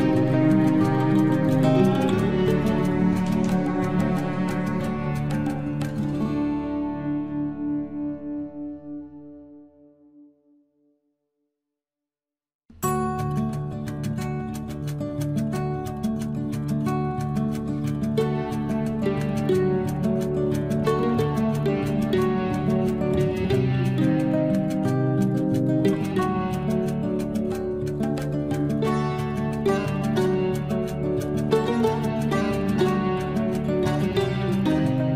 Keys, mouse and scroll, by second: 2.9 Escape, 3.3-4.8 scroll down 1, 5.8 l, 7.8-8.5 scroll up 1, 8.9 click, 10.9 space, 11.6 l, 14.7-15.4 scroll up 1, 15.4 click, 18.4 click, 20.4 space, 20.7 scroll up 1, 21.6-23.0 drag, 22.9 Delete, 24.8 t, 28.7 t, 28.8 scroll up 1, 29.4 Escape, 32.4 Escape, 33.6 click.